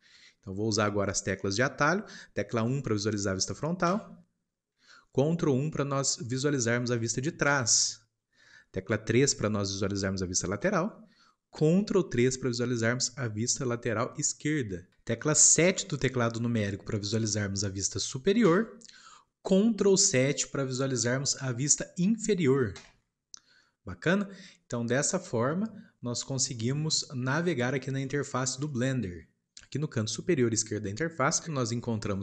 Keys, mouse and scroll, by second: 0.1 shift+middle click, 0.8 scroll up 2, 1.4-3.8 shift+middle drag, 3.8 KP_1, 7.4 ctrl+KP_1, 10.6 KP_3, 18.4 KP_7, 22.7 ctrl+KP_7, 24.8-32.2 middle drag.